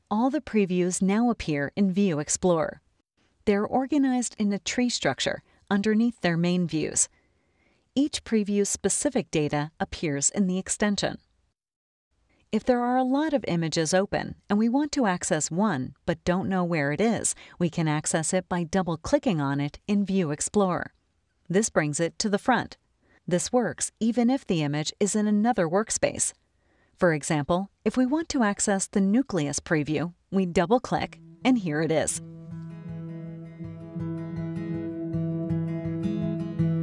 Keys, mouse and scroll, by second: 8.8 click, 10.1 click, 11.5 click, 29.6 click, 30.6 click, 32.7 click.